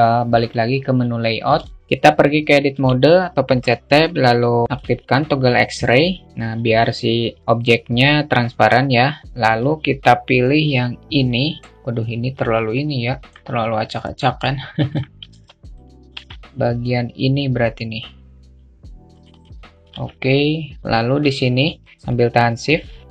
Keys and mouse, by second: 0.0 click, 1.3-2.3 middle drag, 2.3 Tab, 4.2 alt+shift+middle click, 5.3-9.2 drag, 9.2-11.1 drag, 12.2 alt+middle click, 13.7 alt+middle click, 15.5 alt+z, 16.4 a, 18.7 click, 19.4 alt+z, 21.3-23.1 shift+drag.